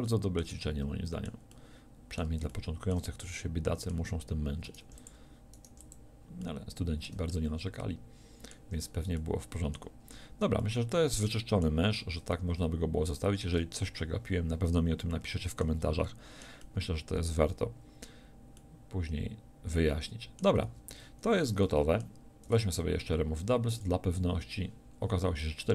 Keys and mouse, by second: 4.6 right click, 4.8 x, 5.7 x, 20.6 a, 22.4 w.